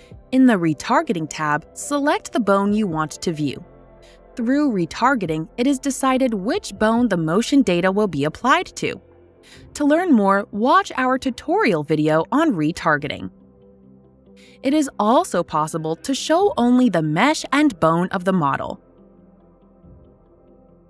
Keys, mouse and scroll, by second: 1.4 click, 3.2 click, 14.8 click, 16.0 click, 17.5 click, 18.2 click, 20.2 click.